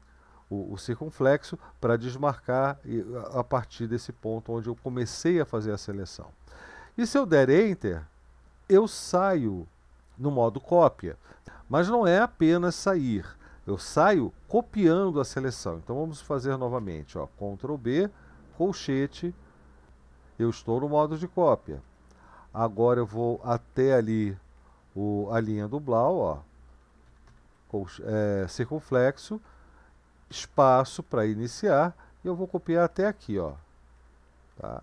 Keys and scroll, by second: 2.2-4.2 typing, 3.8 Up, 4.0 Up, 4.8 Down, 7.5 Return, 16.8 ctrl+b, 18.5 [, 21.6 Up, 21.8 Up, 22.0 Up, 22.2 Up, 22.4 Up, 22.8 Up, 23.4 Up, 23.7 Up, 24.0 Up, 24.2 Up, 30.3 ctrl+space, 31.2 Right, 31.3 Right, 31.5-32.5 Right, 32.9 Left, 33.1 Left, 33.5 Right, 33.9 Left, 34.5 Right.